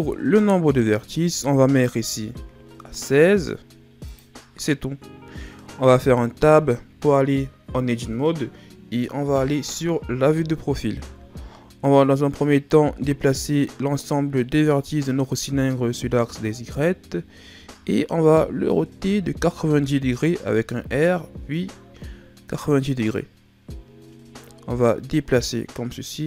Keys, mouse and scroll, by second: 0.9 click, 6.2 Tab, 9.2 KP_3, 10.5-12.6 scroll down 4, 12.6 click, 14.4-15.0 ctrl+scroll down 4, 15.0-15.7 scroll up 3, 15.7-16.4 ctrl+scroll down 5, 16.4-17.2 shift+scroll up 4, 17.2-17.8 scroll up 1, 17.8-18.8 scroll up 2, 18.8 r, 24.4 click.